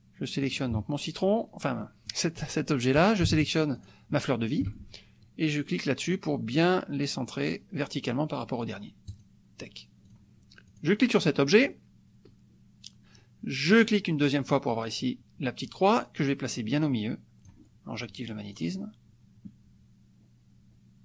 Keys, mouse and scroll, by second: 0.5 click, 1.8 click, 3.7 shift+click, 9.1 click, 10.1 click, 10.8 click, 11.3 click, 13.7 click, 15.7-17.6 drag, 18.7 click.